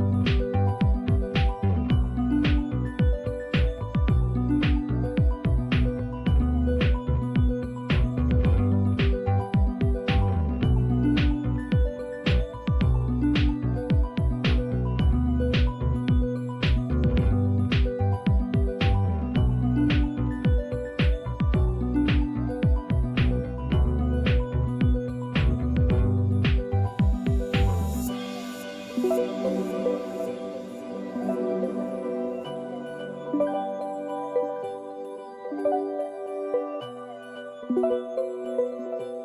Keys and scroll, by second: 7.9 typing, 10.8 Return, 10.8 typing, 18.2-22.4 typing, 24.0 Return, 31.2 typing, 35.4 Return, 35.4 typing, 36.5-38.8 typing.